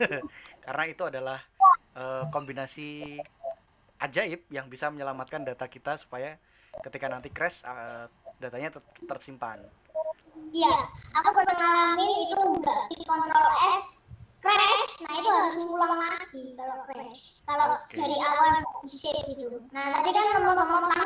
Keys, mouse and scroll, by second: 12.2-21.0 middle drag.